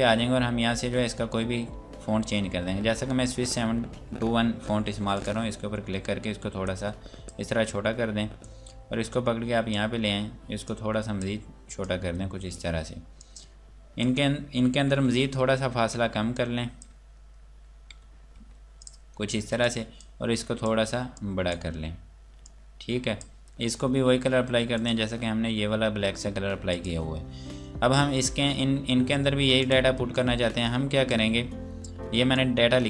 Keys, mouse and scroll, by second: 4.9 scroll up 1, 5.1 click, 15.0 Down, 16.4 click, 16.9 Down, 18.4 Up, 18.8 click, 28.9 scroll down 1, 30.3 click, 31.4 scroll up 1, 31.8 scroll down 1, 32.3 click.